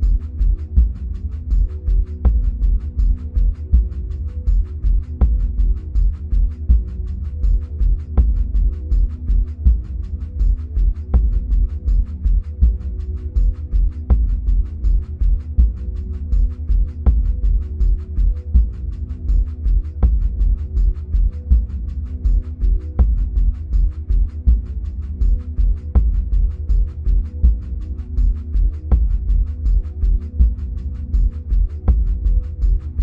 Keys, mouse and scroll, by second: 0.9 middle click, 1.0-4.2 middle drag, 2.8-4.2 scroll up 2, 4.2-9.4 drag, 9.4 middle click, 10.8-13.1 middle drag, 13.1-23.5 drag, 26.4-33.0 drag.